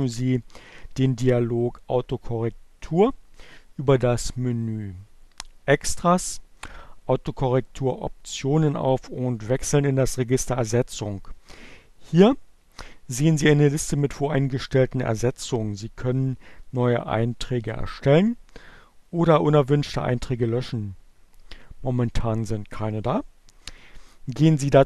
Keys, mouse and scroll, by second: 5.4 click, 8.8 click.